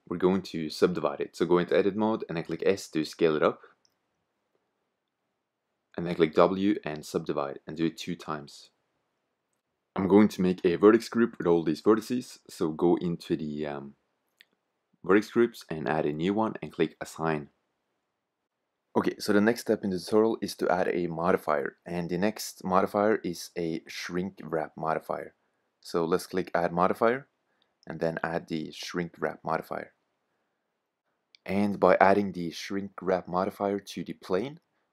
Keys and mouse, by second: 1.0 Tab, 4.4 s, 5.8 w, 8.1 w, 10.4 Tab, 12.3 Tab, 13.7-15.6 drag, 15.7-21.1 drag, 21.1 Tab, 23.9-25.9 drag, 26.8-30.8 drag, 32.1-34.0 drag, 34.0-34.4 middle drag.